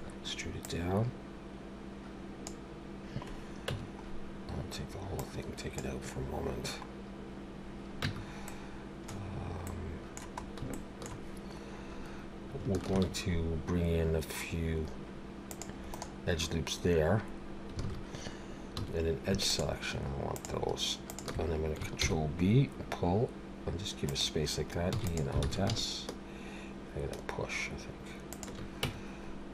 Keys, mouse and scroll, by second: 0.6 click, 3.7 Tab, 4.1-4.6 scroll down 3, 5.1 click, 8.0 Tab, 8.5 middle click, 9.7 middle click, 10.4 scroll up 2, 10.7 shift+middle click, 12.9 ctrl+r, 17.8 alt+a, 18.7 2, 19.5 alt+shift+click, 20.4 alt+shift+click, 21.3 alt+shift+click, 22.0 ctrl+b, 24.9 e, 25.4 alt+s, 28.8 Tab, 29.4 scroll down 1.